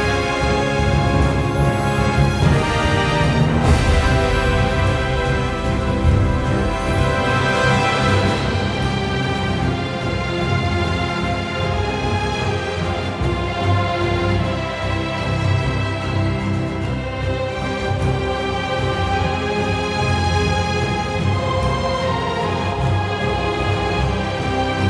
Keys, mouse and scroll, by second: 0.3 ctrl+z, 1.6 ctrl+z, 2.8 ctrl+z, 14.9 ctrl+z, 15.5 ctrl+z, 17.5 ctrl+z, 23.1 ctrl+z.